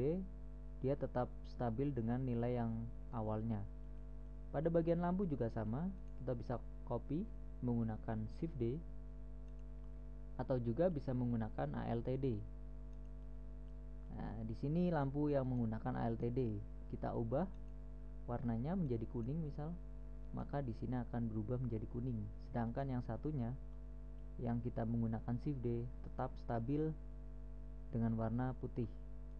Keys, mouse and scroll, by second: 2.9-4.2 middle drag, 7.6 right click, 9.0 shift+d, 12.5 alt+d, 13.7 middle click, 13.8 middle click, 16.0-18.0 right drag, 19.2 right click, 20.6-22.3 right drag, 22.5 middle drag, 23.2-24.2 right drag, 24.2-28.8 middle drag, 29.1-29.3 middle drag.